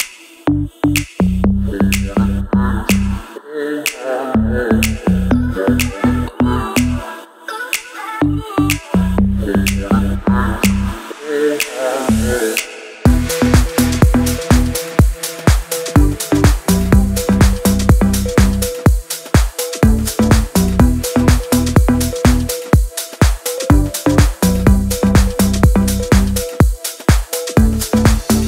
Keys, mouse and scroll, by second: 1.9 Down, 3.2-11.6 alt+drag, 18.4 click, 23.8 click.